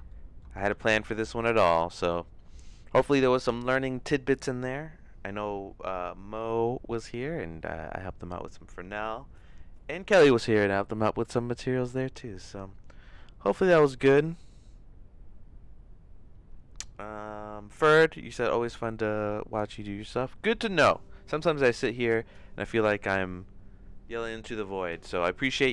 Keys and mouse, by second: 0.1 shift+middle click, 0.7 ctrl+s.